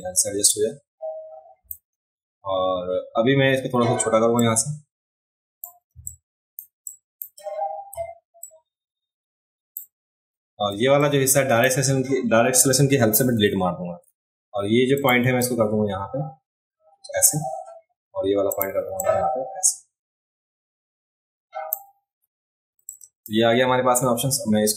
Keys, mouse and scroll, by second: 4.4-5.6 drag, 5.9 space, 6.1 click, 6.9 click, 8.4-9.7 shift+drag, 11.0 click, 15.0 click, 15.4-17.2 drag, 18.5 click, 19.0-21.7 drag, 22.8 space, 22.8 click.